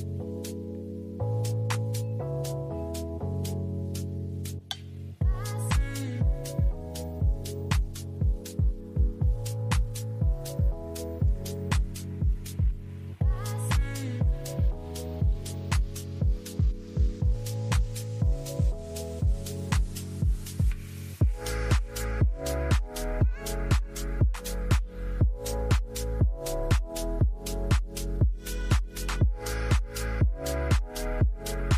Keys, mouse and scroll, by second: 0.7-1.0 typing, 3.2 typing, 6.4 double click, 13.4 ctrl+click, 15.6 ctrl+click, 18.8 ctrl+click, 26.2 |, 29.8 shift+\, 30.1 shift+click.